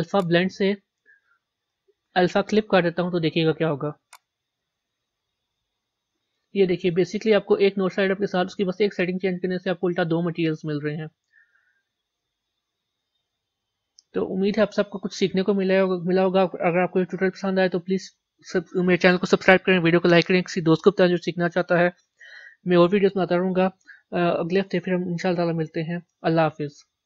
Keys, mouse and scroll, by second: 4.6 click, 5.9-11.1 middle drag.